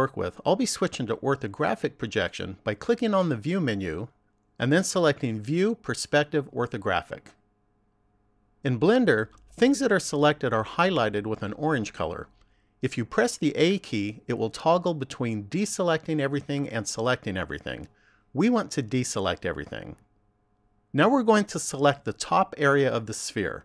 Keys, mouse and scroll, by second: 3.7 click, 13.7 a, 16.4 a, 18.6 a.